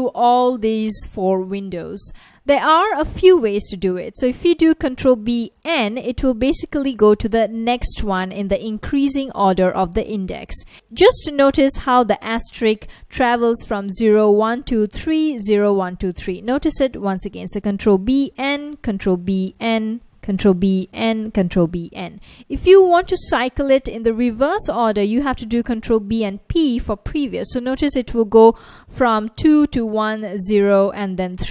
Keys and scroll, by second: 5.2 ctrl+b, 5.6 n, 7.1 ctrl+b, 7.7 n, 8.5 ctrl+b, 8.9 n, 10.4 ctrl+b, 12.7 F1, 17.9 ctrl+b, 18.6 n, 19.2 ctrl+b, 19.6 n, 20.3 ctrl+b, 21.0 n, 21.6 ctrl+b, 21.9 n.